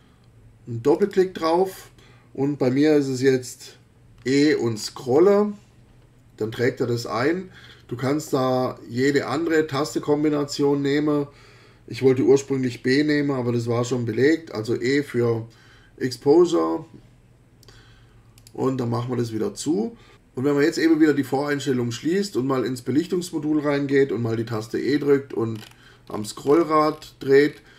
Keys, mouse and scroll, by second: 0.9 click, 4.2 e, 4.3-4.7 scroll down 1, 4.7-5.1 scroll up 1, 18.4 click, 24.5 e, 24.8-25.3 scroll down 2, 25.5-25.9 scroll up 2, 26.1-26.4 scroll down 2, 26.5-26.8 scroll up 1, 26.9-27.7 scroll down 4.